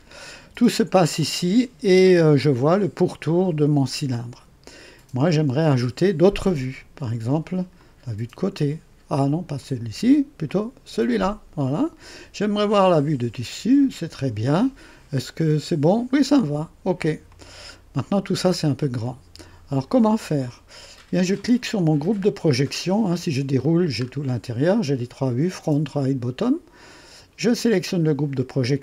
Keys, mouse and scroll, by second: 0.5 scroll down 1, 1.0-1.8 right drag, 2.0 right click, 7.7 click, 9.6 click, 10.4 click, 12.6 click, 15.3 scroll down 1, 17.2 click, 18.1-18.5 scroll down 2, 18.5 scroll up 1, 19.2 right click, 22.2 click, 23.6 click, 24.0 scroll down 1, 27.5 click.